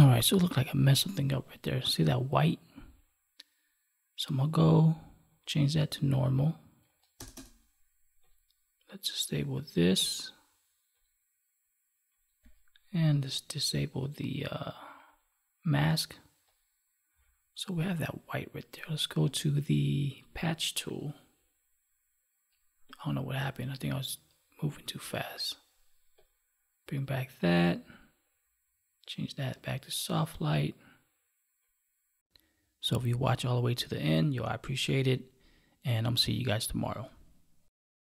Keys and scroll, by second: 32.9 ctrl+s, 34.2 space, 36.3 space.